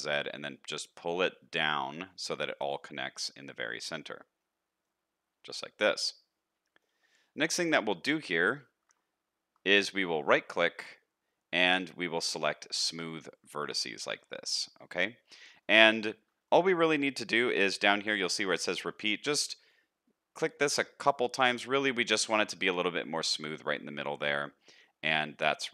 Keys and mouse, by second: 3.0-4.1 middle drag, 5.0-6.8 middle drag, 7.5 shift+middle click, 7.7 middle click, 14.0 shift+middle click, 14.5 middle click, 15.1 shift+middle click, 15.6 middle click, 16.4 shift+middle click, 21.1-22.3 middle drag, 22.8-25.7 middle drag.